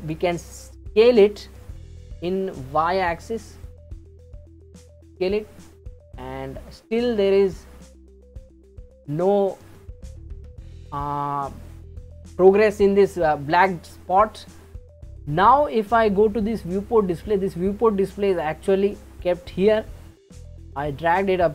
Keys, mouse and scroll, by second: 1.8 s, 7.6-10.3 scroll up 3, 10.3-11.4 scroll up 1, 17.2-19.2 drag, 20.3-21.5 drag.